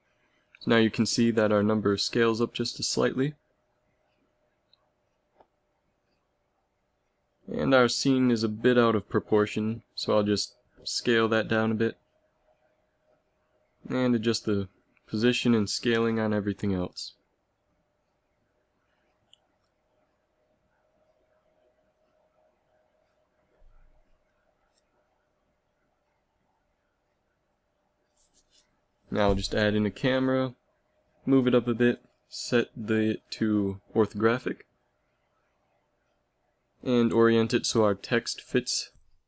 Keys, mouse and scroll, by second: 5.7 s, 10.2 s, 12.1 click, 13.1 click, 14.4 g, 15.0 click, 18.1 click, 18.6 s, 19.8 click, 20.9 click, 21.4 s, 23.5 a, 25.2 ctrl+s, 27.2 shift+a, 30.0 alt+r, 30.3 alt+g, 30.9 g, 37.4 KP_1, 38.0 z, 38.8 g.